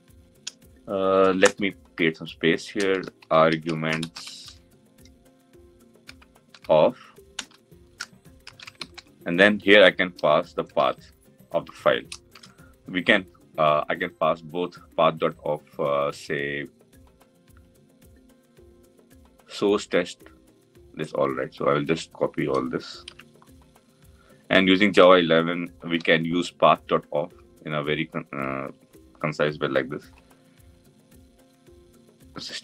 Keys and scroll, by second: 1.7 Return, 7.0 Return, 8.5 Return, 22.7 ctrl+c, 25.6 ctrl+v.